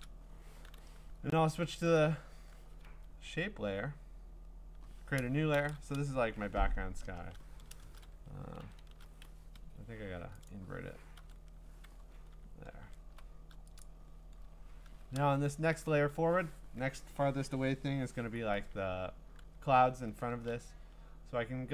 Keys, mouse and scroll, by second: 0.7 typing, 2.0 right click, 2.9 Escape, 5.5 ctrl+shift+n, 7.0 Return, 8.6 ctrl+i, 9.5 Escape, 10.5 click, 11.2 ctrl+i, 12.4 scroll, 13.8 click, 14.5-14.9 scroll.